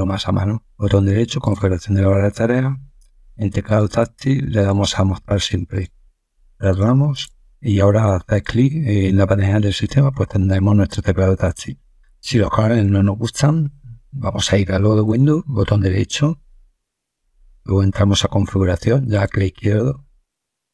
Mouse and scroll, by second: 1.3 click, 3.6 click, 4.5 click, 5.6 click, 6.6 click, 7.1 click, 8.2 click, 10.4 click, 15.0 right click, 16.4 right click, 19.0 click.